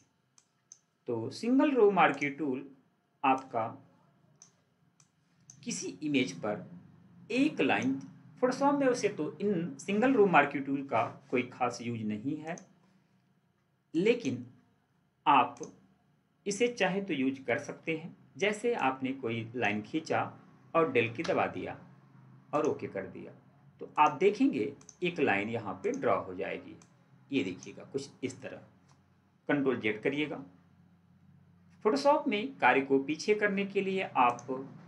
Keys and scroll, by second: 17.4 ctrl+d, 30.0 ctrl+z.